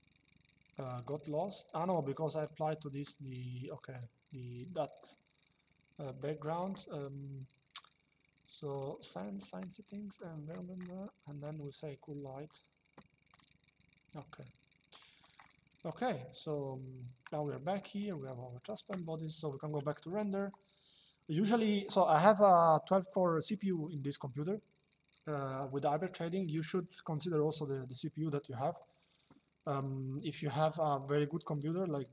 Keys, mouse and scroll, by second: 1.5 click, 4.4 click, 5.9 click, 8.4 click, 9.8 click, 11.1 click, 13.0 click, 14.6 click, 15.6 middle click, 19.2 click, 28.5 click, 31.1 click.